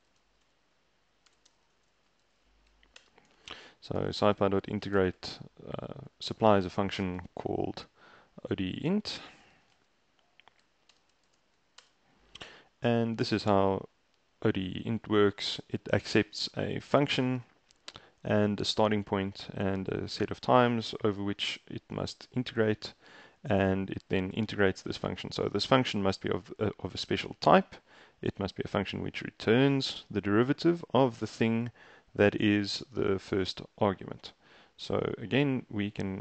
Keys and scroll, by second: 0.0-11.8 typing, 3.0 shift+Return, 10.7 Down, 11.0 Return, 11.9 shift+Return.